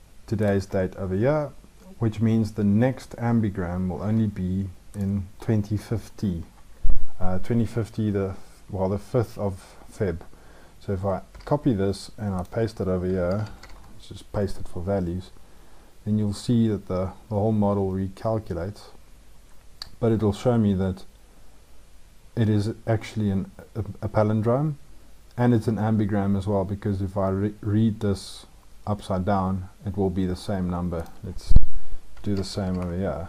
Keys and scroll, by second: 11.1 ctrl+c.